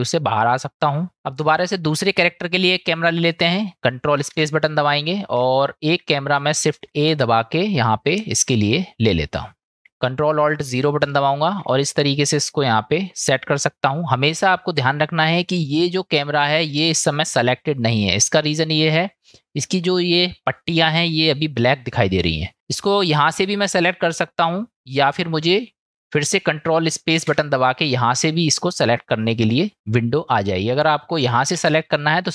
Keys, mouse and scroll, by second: 1.7-2.1 shift+middle drag, 4.3 ctrl+space, 5.6-6.7 shift+drag, 6.7 shift+a, 11.1 ctrl+alt+KP_0, 27.3 ctrl+space, 31.7 ctrl+space.